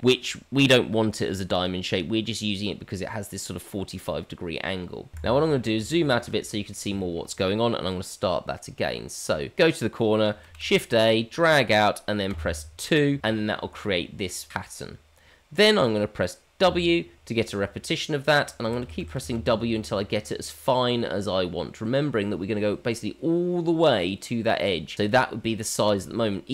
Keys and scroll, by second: 10.5 shift+a.